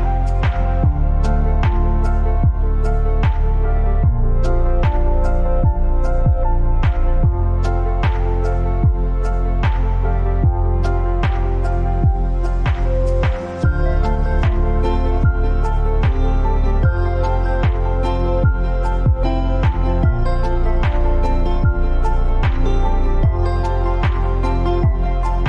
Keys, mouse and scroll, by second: 0.0-0.3 typing, 1.9 click, 3.5-4.1 scroll down 1, 5.0-8.5 drag, 8.5 Up, 10.9 Down, 20.5 click.